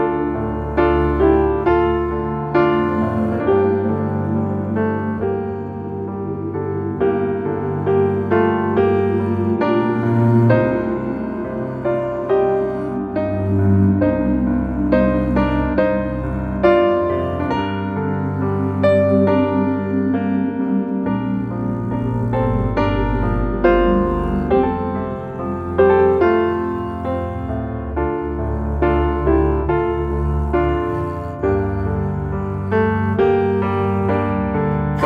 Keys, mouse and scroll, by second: 0.6 Tab, 1.2 right click, 2.1 click, 2.4 scroll down 2, 2.7 click, 3.5 Tab, 3.8 click, 4.5 click, 4.7 click, 5.8 e, 10.2 alt+middle click, 10.8 s, 13.3-14.3 middle drag, 14.3 ctrl+z, 15.1 s, 16.3 click, 16.7 s, 17.8-19.0 middle drag, 19.0 scroll up 2, 19.3-20.5 shift+middle drag, 20.5 alt+click, 21.5 click, 22.1 alt+click, 22.6 alt+shift+click, 23.3 ctrl+b, 26.5 Tab, 27.0-28.5 middle drag, 29.8 Tab, 30.2 middle click, 31.5 click, 32.3 click, 32.8 click, 34.1 shift+click, 34.5 middle click.